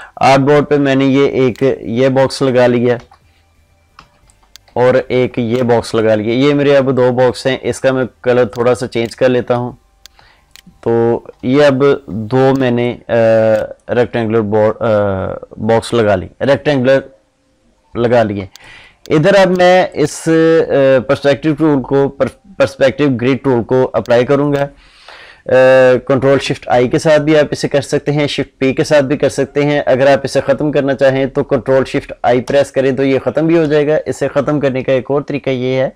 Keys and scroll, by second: 26.6 ctrl+shift+i, 32.4 ctrl+shift+i.